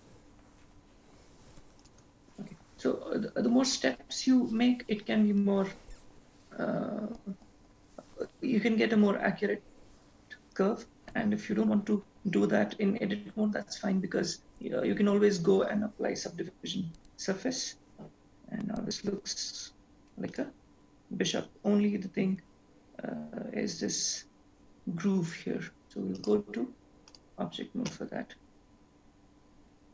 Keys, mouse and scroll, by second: 10.6 click, 12.2-13.4 scroll down 8, 13.4-13.9 scroll down 2, 13.9-14.4 scroll up 3, 17.2-18.2 scroll down 4, 18.2-18.9 scroll down 3, 18.9-19.6 scroll down 1, 19.6 scroll down 2, 20.1-20.9 scroll up 4, 20.9 click, 22.8 scroll up 4, 23.7 scroll up 1, 26.4 click, 28.6-29.9 scroll down 4.